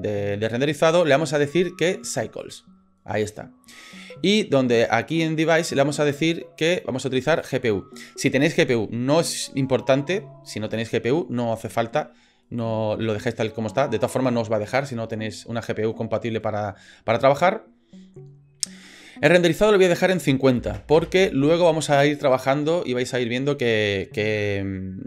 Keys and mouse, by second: 0.9-2.6 drag, 6.6 click, 19.6-21.6 drag.